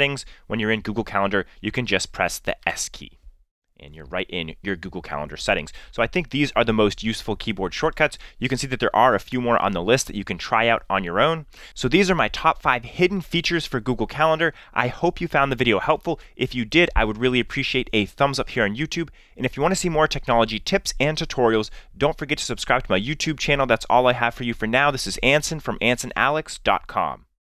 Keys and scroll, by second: 2.6 s.